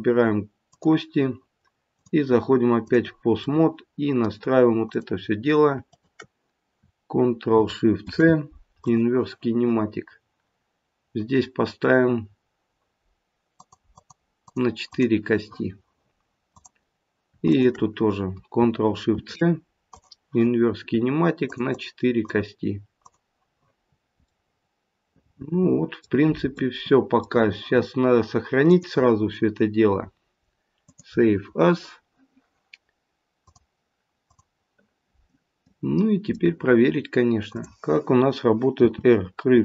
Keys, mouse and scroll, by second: 0.6 click, 1.9 click, 3.4 middle click, 4.9 click, 5.8 shift+click, 9.0 ctrl+shift+c, 13.6 click, 13.9 click, 14.8 click, 16.4 click, 17.5-17.9 shift+click, 19.1 ctrl+shift+c, 21.4 click, 21.6 click, 23.0 click, 23.8-24.2 scroll down 2, 24.2 middle click, 25.1 middle click, 28.6 click, 35.5-36.7 scroll down 1, 36.7 middle click, 36.7-37.5 scroll up 1, 37.5 click, 37.5-38.7 scroll up 1, 38.7 r.